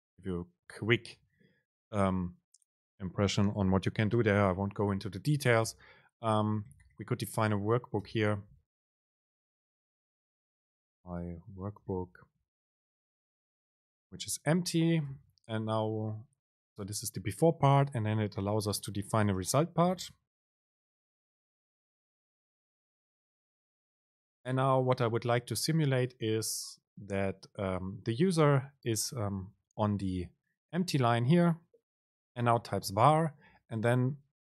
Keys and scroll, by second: 0.7 Down, 5.8 Return, 8.0 super+space, 10.8 BackSpace, 14.5 Down, 15.1 Return, 15.8 super+space, 24.6 super+v.